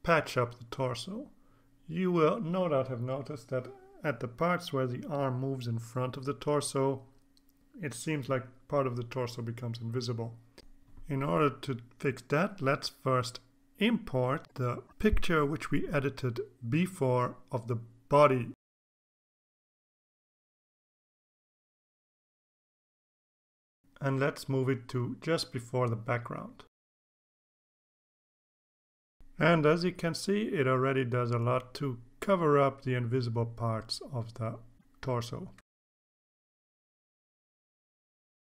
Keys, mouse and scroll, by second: 15.5 alt+Tab, 16.6 alt+Tab, 18.6-20.2 drag, 21.5 click, 24.1 click, 24.4-25.5 drag, 27.3-29.4 drag, 30.6-38.4 drag.